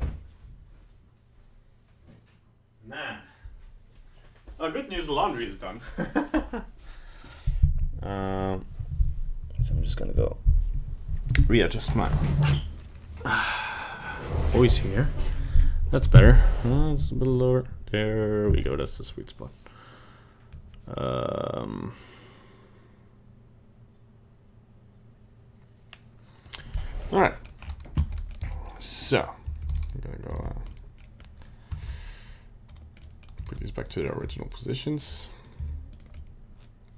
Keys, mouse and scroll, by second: 27.2 middle click, 27.6-28.0 scroll up 4, 28.2 middle click, 28.3 middle click, 28.4 a, 29.6 alt+r, 29.7 alt+g, 30.3 alt+s, 30.7 middle click, 31.8 ctrl+Tab, 32.7 right click, 33.1 middle click, 33.2 middle click, 33.5 ctrl+Tab, 33.8 right click, 34.2 g, 35.5 right click, 35.6 g, 36.2 middle click.